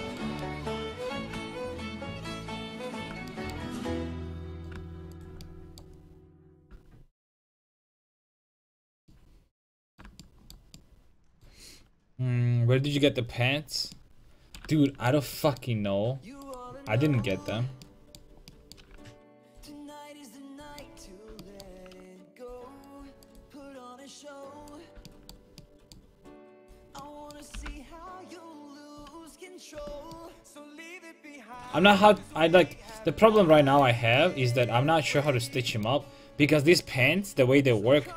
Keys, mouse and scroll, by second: 2.5-5.2 middle drag, 5.2-8.6 right drag, 6.6-8.6 drag, 8.8 a, 16.5-18.6 right drag, 19.5-25.1 right drag, 20.5 a, 24.4 x, 25.1-26.7 middle drag, 26.7 click, 27.1 right click, 27.6 g, 28.8 a, 29.8 Tab, 35.2-37.1 right drag.